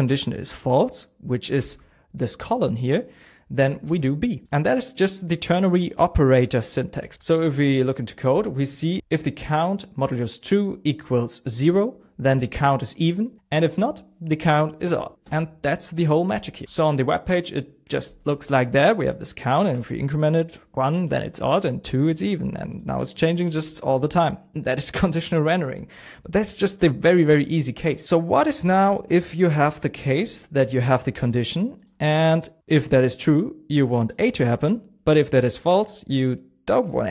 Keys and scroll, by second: 1.5 shift+:, 3.8 shift+b, 16.7 super+Tab, 27.7 super+Tab, 34.2 BackSpace.